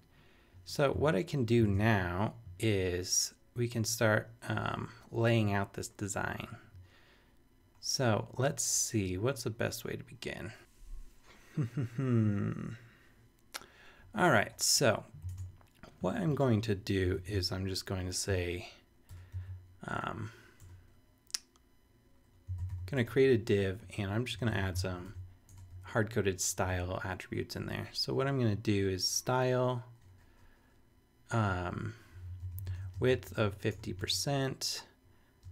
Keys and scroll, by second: 1.7 super+Tab, 15.4 super+Tab, 17.1 shift+super+Left, 18.3 super+b, 19.1 typing, 20.6 BackSpace, 22.2-23.2 typing, 23.8 Left, 24.2-26.2 typing, 31.9-35.5 typing.